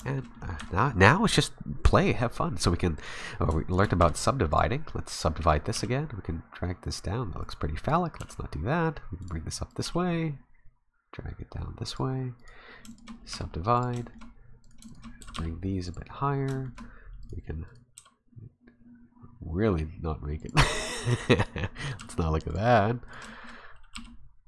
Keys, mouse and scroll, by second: 0.0 shift+middle click, 0.3 middle click, 0.6 Tab, 3.0 right click, 3.7 shift+right click, 4.0 w, 5.4 right click, 5.7 g, 7.9 right click, 8.2 g, 9.7 right click, 9.8 g, 12.4 right click, 12.9 shift+right click, 13.3 w, 14.0 shift+middle click, 14.6 right click, 14.9 shift+right click, 15.2 g, 16.5 shift+middle click, 17.2 right click, 17.8 right click, 18.2 g, 19.5 s, 20.8 right click, 21.1 g, 21.8 right click, 22.0 g, 23.1 right click, 23.3 shift+middle click, 23.4 shift+scroll up 1, 23.9 g.